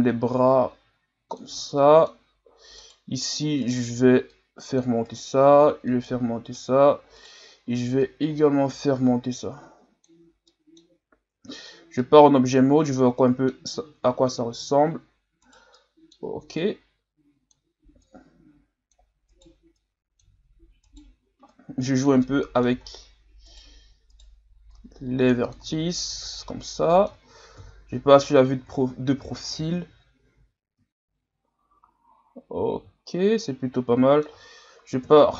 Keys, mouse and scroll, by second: 1.6-2.8 middle drag, 2.8 right click, 3.6 right click, 4.3 click, 5.1 right click, 5.9 click, 7.2 right click, 8.0-10.5 drag, 10.5 middle click, 11.3 Tab, 11.7 scroll down 4, 12.0-13.7 middle drag, 13.7-14.1 scroll up 3, 14.1 scroll down 1, 14.3 scroll up 2, 14.5 Tab, 15.5 right click, 15.7 middle click, 16.6-19.3 drag, 19.3 right click, 19.7-20.8 drag, 20.8 right click, 21.5 click, 22.3 middle click, 22.9-23.5 scroll down 2, 23.5 right click, 24.1 right click, 24.7 click, 25.7 Tab, 26.1-26.5 scroll down 1, 26.5-27.6 middle drag, 27.6 KP_3, 28.8-30.4 scroll down 2, 30.4-31.9 scroll down 3, 31.9 scroll down 1, 32.1-33.0 scroll up 1, 33.0 scroll up 2, 33.5-35.0 middle drag, 35.0 KP_1.